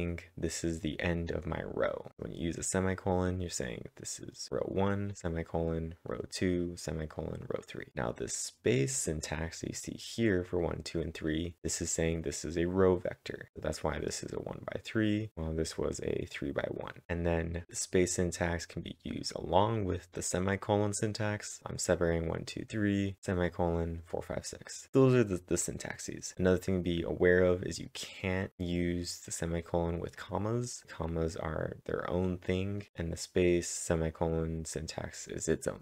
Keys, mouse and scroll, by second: 3.3 click, 3.3-8.5 click, 8.9 click, 9.3 click, 9.7 click, 14.9-17.0 drag, 15.2-16.2 scroll up 1, 17.0 click, 17.4-23.1 click, 27.5 click, 27.5 scroll down 1, 27.5 click, 30.2 click, 30.2-31.8 scroll down 1, 32.8 click, 32.8-34.5 scroll down 1.